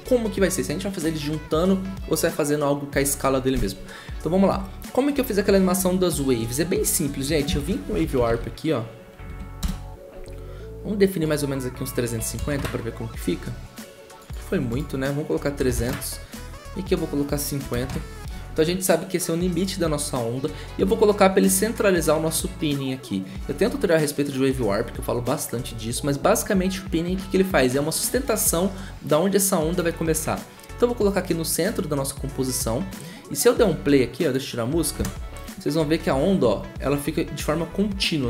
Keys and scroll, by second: 7.6-8.7 typing, 9.2 ctrl+Down, 9.6 Return, 11.9-12.9 typing, 15.1-15.9 typing, 17.3-18.1 typing, 34.9 0.